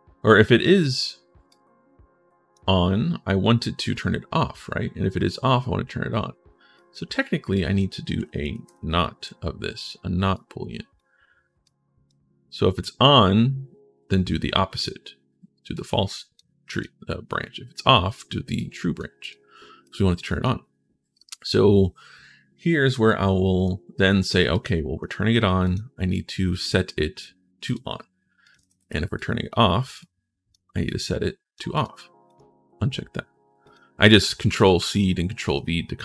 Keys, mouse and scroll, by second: 1.3-2.3 drag, 6.5 click, 7.3 click, 8.4 t, 9.6 click, 10.1 click, 11.4 click, 15.5 click, 16.5 click, 18.3 click, 19.0 click, 19.6 click, 23.3 click, 24.3 click, 25.4 click, 25.9 click, 26.4 click, 27.4 click, 28.2 click, 28.9 click, 29.8 click, 30.6 click, 31.5 click, 32.0 click, 33.4 click, 34.3 ctrl+click, 35.2 click.